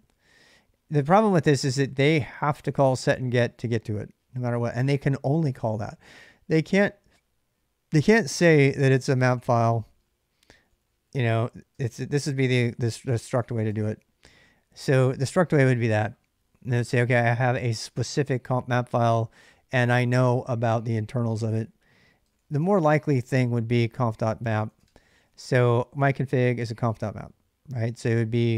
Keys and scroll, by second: 0.7-5.8 typing, 7.8-13.7 typing, 21.1 ctrl+[, 21.2-25.5 typing.